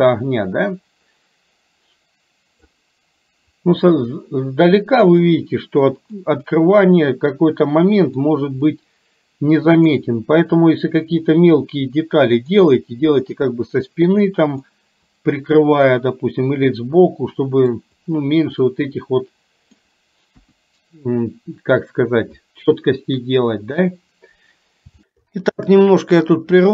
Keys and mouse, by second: 6.2-8.2 middle drag, 8.7-10.0 middle drag, 11.4-12.7 middle drag, 14.7-17.9 middle drag, 18.6-19.9 middle drag, 20.4 KP_1, 25.9 shift+middle click.